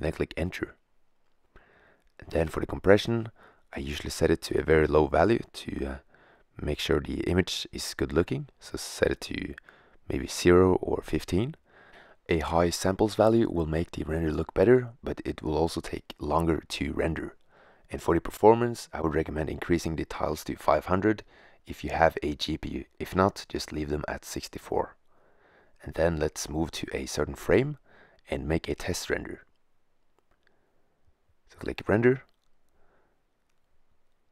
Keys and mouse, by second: 0.0 Return, 9.4-12.4 drag, 12.3 0, 13.7-17.7 middle drag, 17.7-20.0 drag, 20.2-21.3 drag, 22.0 0, 24.3-25.9 drag, 29.7 shift+z, 32.6 shift+z.